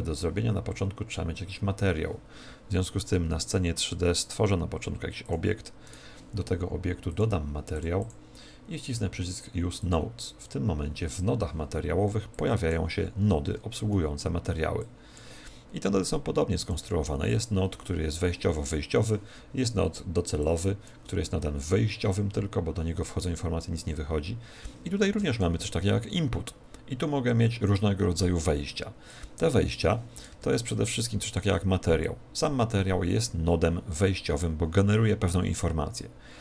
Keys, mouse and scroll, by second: 3.3 shift+a, 5.8 right click, 8.1 click.